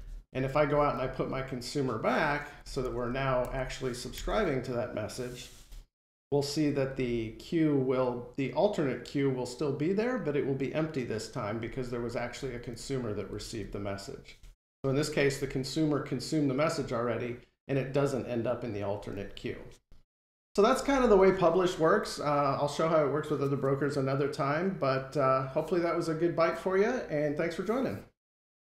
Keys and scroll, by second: 5.9 F5.